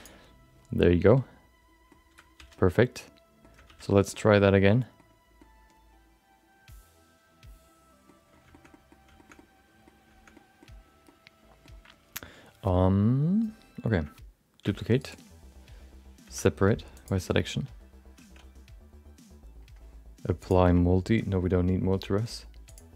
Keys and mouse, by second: 1.0 middle click, 2.3 alt+z, 2.6 middle click, 3.6 alt+z, 4.2 middle click, 4.6 middle click, 5.5-8.1 middle drag, 8.7 middle click, 9.2 shift+middle click, 9.4 middle click, 10.4 middle click, 11.2 middle click, 14.7 shift+d, 16.2 p, 18.9 Tab.